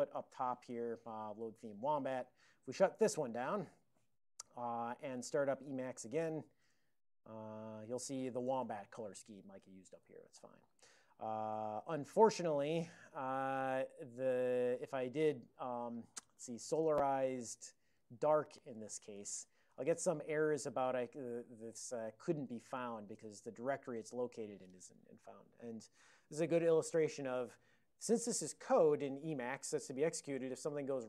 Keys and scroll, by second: 0.3 ctrl+n, 0.5 ctrl+o, 0.8 ctrl+y, 1.5 ctrl+x, 1.8 ctrl+s, 3.5 super+[, 5.5-6.5 typing, 6.7 Return, 8.8 ctrl+p, 10.1 ctrl+n, 10.5 ctrl+n, 13.5 super+j, 15.1 alt+b, 15.4 alt+b, 15.8 alt+d, 16.3-19.1 typing, 19.2 ctrl+x, 19.3 ctrl+s, 22.3-23.3 typing, 23.3 Return.